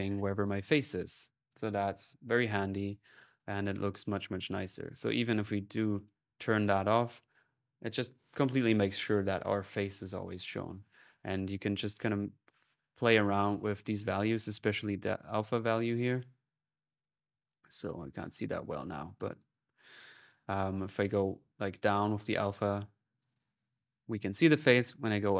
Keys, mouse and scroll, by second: 0.4 click, 2.9 click, 3.9 click, 4.9 middle click, 5.8 click, 6.6 middle click, 6.9-8.2 drag, 9.8-18.5 drag, 10.2 middle click, 16.9 middle click, 18.8-20.2 drag, 20.9-24.7 drag, 24.8-25.3 drag.